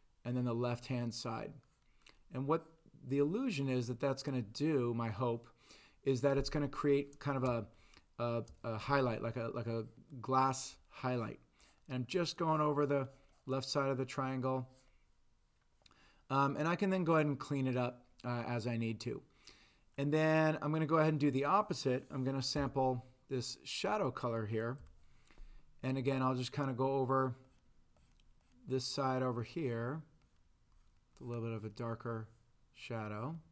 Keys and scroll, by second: 22.6 i, 24.8 b.